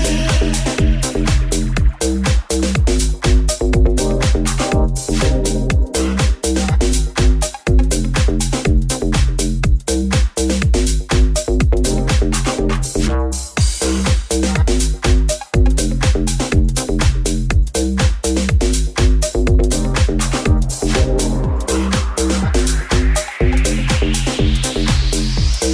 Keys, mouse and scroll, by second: 2.2-6.3 shift+drag, 6.3-15.0 drag, 11.3 right click, 12.9 shift+s, 16.2-17.7 drag, 17.7-22.2 middle drag, 17.7 g, 18.5 s, 20.3 KP_1, 25.4 Tab.